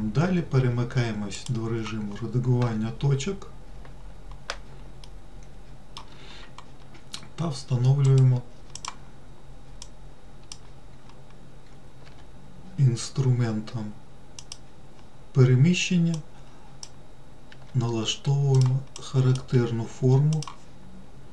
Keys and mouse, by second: 1.7 click, 5.4 shift+middle click, 9.0 click, 10.2 click, 12.4 g, 16.5 click, 17.8 g, 19.4 click, 19.9 g.